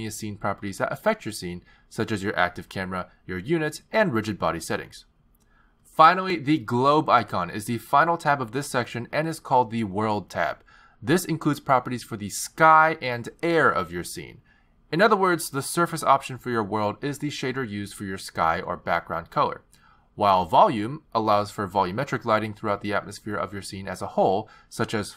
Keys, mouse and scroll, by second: 3.5 click, 3.8 click, 5.6 click, 6.2 click, 8.4 click, 21.9 click, 23.2 click.